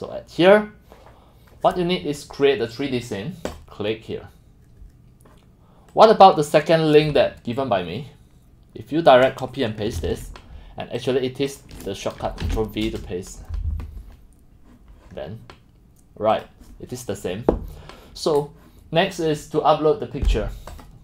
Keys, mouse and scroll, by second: 0.0-3.4 drag, 3.6-9.3 drag, 10.0 ctrl+c, 11.5 click, 12.6 ctrl+v, 12.8 Return, 16.4 click.